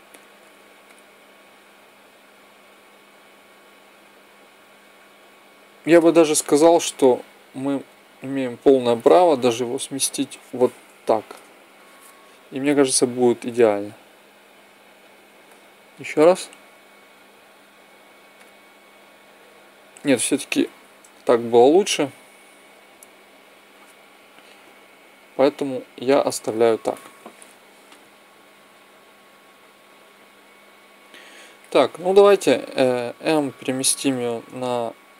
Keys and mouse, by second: 0.6-2.2 drag, 6.3 Escape, 9.5 g, 13.1 alt+a, 15.7-17.5 drag, 18.1 click, 18.6-19.8 drag, 20.3 Escape, 22.5 g, 27.5-29.2 drag, 32.6 m, 35.0-35.1 drag.